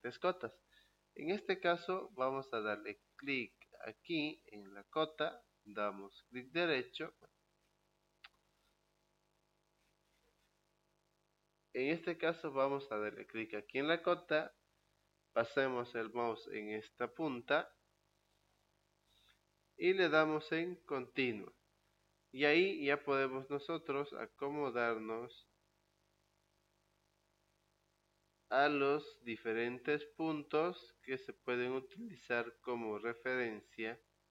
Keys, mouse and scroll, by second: 3.7 click, 6.0 right click, 7.5 click, 8.7 click, 11.2 Escape, 13.5 click, 21.1 click, 26.9 click, 30.1 click, 33.5 click.